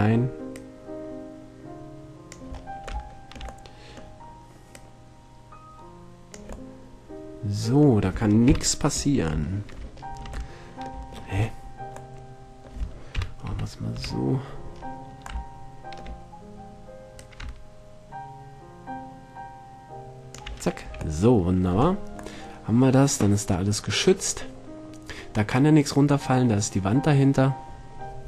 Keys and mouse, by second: 2.7-4.9 middle drag, 4.9 click, 6.7 middle drag, 8.7 KP_7, 13.3 KP_7, 13.7 KP_2, 14.1 KP_2, 17.4-19.2 drag, 20.9-21.8 middle drag, 21.1 a, 26.5-28.2 middle drag.